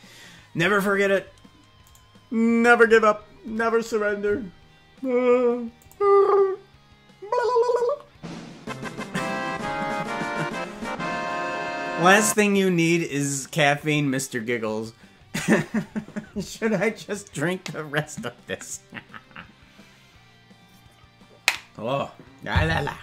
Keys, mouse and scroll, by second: 2.1 right click, 5.8 click.